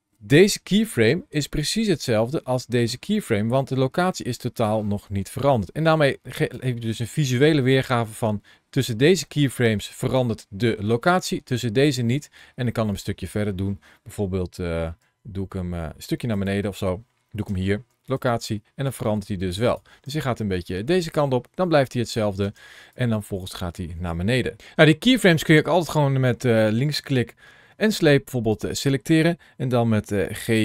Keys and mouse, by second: 5.7 click, 7.0 middle click, 8.6-13.1 drag, 14.8 g, 16.1 click, 17.3 i, 18.7 click, 19.7 space, 20.7-22.0 drag, 22.2 space, 22.7-24.5 drag, 24.9 click, 28.0 click, 30.2 g.